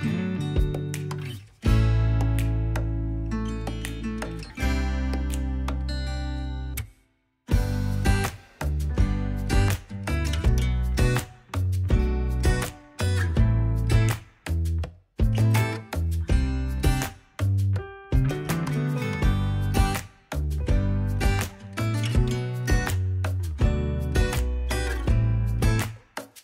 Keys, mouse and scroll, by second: 0.0 KP_3, 0.1 scroll up 4, 0.3 ctrl+Tab, 0.5 ctrl+Tab, 0.5-1.6 drag, 1.4 scroll down 3, 1.6 f, 1.7-3.0 drag, 1.9 alt+z, 2.0 scroll up 4, 2.8 alt+z, 2.9 ctrl+Tab, 3.0 click, 3.0 scroll down 3, 3.6 KP_1, 3.7 scroll up 4, 3.8 click, 3.9 click, 4.0 ctrl+a, 5.2 click, 5.5 ctrl+a, 5.8 click, 6.2 scroll down 4, 6.3 shift+middle drag, 6.8 middle click, 8.6 scroll up 3, 8.8 scroll down 5, 8.9 click, 9.0-13.2 typing, 9.3 scroll, 10.2 scroll down 2, 10.3 shift+middle click, 10.4 click, 10.7 scroll, 12.0 scroll, 12.0 click, 12.8 ctrl+Tab, 12.8 click, 13.0 alt+z, 13.3-14.5 drag, 14.5-15.0 scroll up 5, 14.7 click, 15.0-16.4 drag, 16.4 scroll down 3, 16.4 shift+click, 16.4 shift+middle click, 17.1 middle click, 17.2-18.3 drag, 17.3 middle click, 18.3-18.8 scroll down 3, 18.9 KP_1, 19.0 scroll up 4, 19.1 click, 19.3 scroll down 1, 19.4 middle click, 19.9 KP_1, 20.0 ctrl+Tab, 20.2 ctrl+a, 20.5 click, 21.3 scroll up 2, 21.6 click, 21.7 scroll down 2, 21.8 click, 21.9-23.4 typing, 22.3 scroll up 1, 22.6 scroll down 3, 22.7 click, 23.7 ctrl+Tab, 23.9-25.0 drag, 25.0 scroll up 3, 25.1 click, 25.5 shift+middle click, 25.6 click, 25.8 ctrl+z, 26.0 f, 26.0 click.